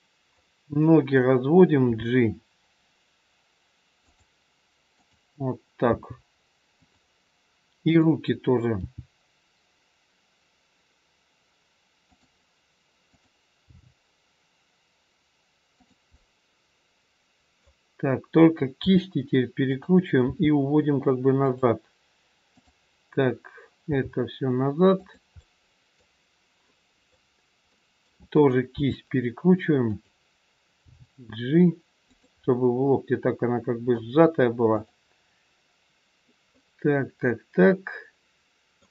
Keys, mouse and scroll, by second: 0.4 middle click, 1.9 g, 5.0 click, 6.0 g, 7.7 click, 8.8 g, 13.1 click, 13.8 g, 16.1 middle click, 18.9 r, 20.3 g, 22.5 click, 23.9 g, 25.2 middle click, 28.7 r, 30.8 g, 32.5 middle click, 34.7 click, 36.5 middle click.